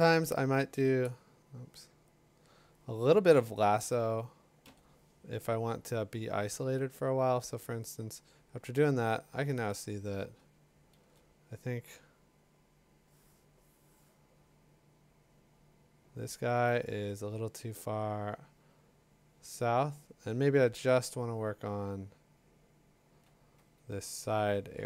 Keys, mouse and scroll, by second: 1.0 Escape, 2.3-5.3 drag, 4.6 i, 11.0 l, 23.1-24.8 drag, 24.0 Escape.